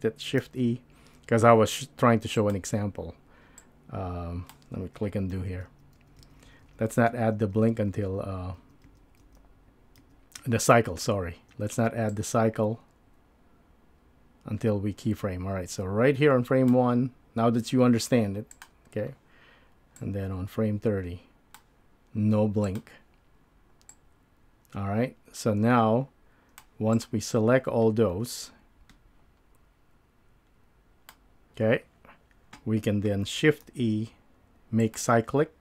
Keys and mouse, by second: 0.4 shift+e, 3.6-4.5 drag, 5.3 super+z, 5.8 super+z, 6.1 super+z, 6.3 super+z, 6.5 super+z, 6.7 super+z, 18.5 click, 20.0-21.6 drag, 22.6 click, 23.9-26.6 drag, 27.0 click, 33.6 shift+e.